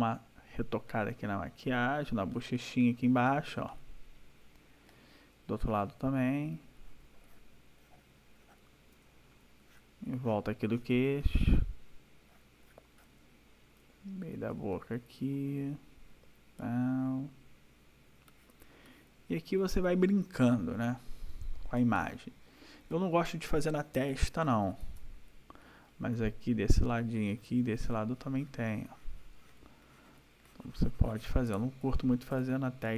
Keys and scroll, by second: 8.9 ], 19.6 \, 21.7 space, 32.3 ctrl+-.